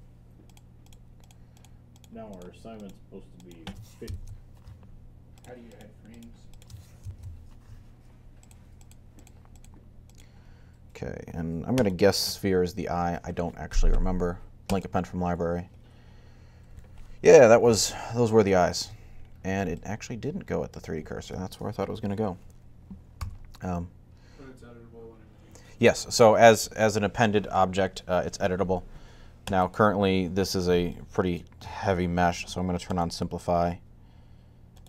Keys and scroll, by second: 23.0 g.